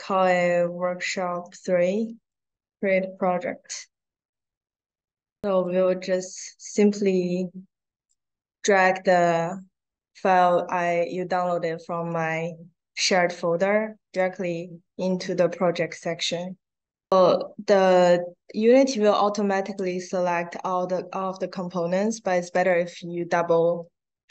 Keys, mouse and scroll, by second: 0.1 r, 0.6 s, 1.2 space, 2.2 click, 7.1 click, 12.7-14.0 drag, 17.3 middle click, 19.2 click, 22.4 click.